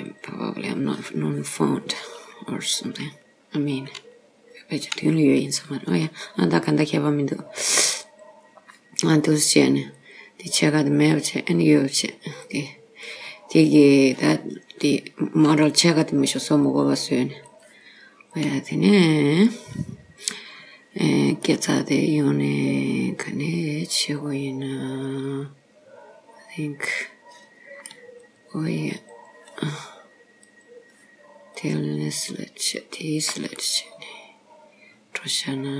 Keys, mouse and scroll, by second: 0.2 click, 6.8 click, 8.2 click, 10.1 click, 11.1 click, 12.2 click, 12.5 click, 15.3 click, 16.7 click, 18.4 click, 19.3-19.8 scroll down 2, 20.6-21.1 scroll up 3, 21.1-21.5 scroll up 1, 21.5 middle click, 28.3 click, 29.1 click, 30.6 click, 31.6 click, 32.8 shift+click, 33.7 middle click.